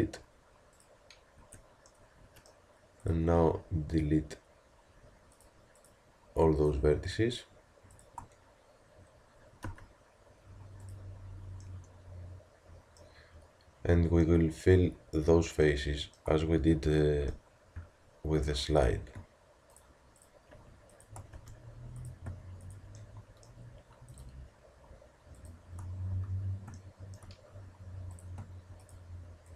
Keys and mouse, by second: 1.4 Tab, 9.6 x, 18.8-23.0 drag, 21.4 f, 23.0-24.5 middle drag, 26.1 f, 27.0 middle click, 27.1-28.1 middle drag.